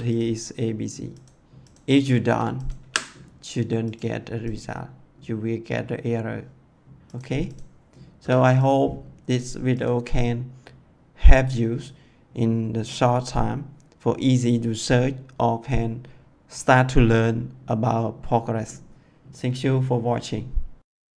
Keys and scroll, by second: 2.7 d, 8.1 BackSpace.